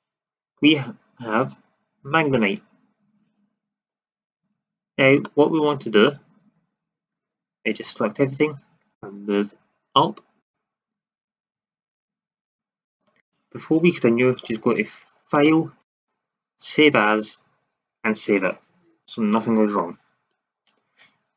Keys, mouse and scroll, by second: 0.1 shift+z, 4.4 shift+z, 5.2 middle click, 7.6 a, 7.8 a, 8.9-11.0 drag, 11.5 a.